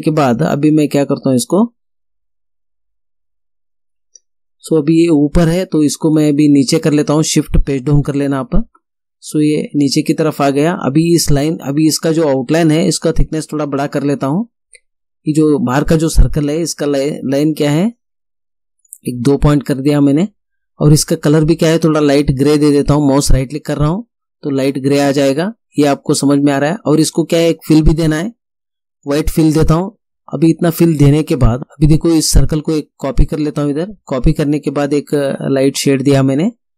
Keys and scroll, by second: 8.1 shift+Page_Down.